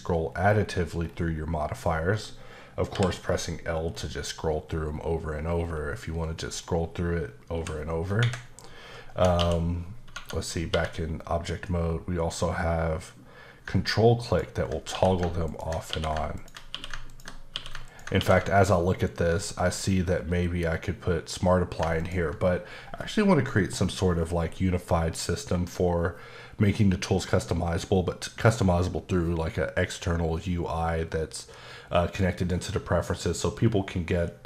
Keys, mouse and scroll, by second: 0.3-0.6 scroll down 4, 1.0-1.4 scroll up 4, 1.8-2.9 scroll up 6, 2.9 l, 3.2-4.6 scroll up 10, 4.6-7.5 scroll down 14, 7.5 l, 8.2 Escape, 9.4 q, 10.1 Tab, 10.7 q, 14.2 ctrl+click, 14.9-18.2 typing, 15.4 ctrl+click, 16.3 ctrl+click, 17.1 ctrl+click, 17.8 ctrl+click, 22.0 ctrl+click.